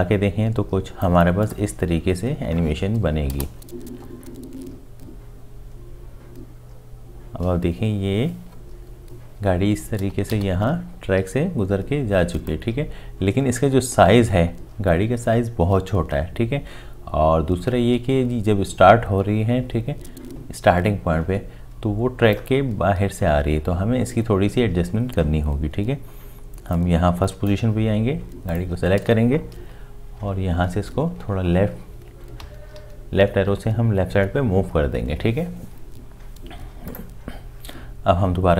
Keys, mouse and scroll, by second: 3.3 space, 10.3 space, 30.2 Left.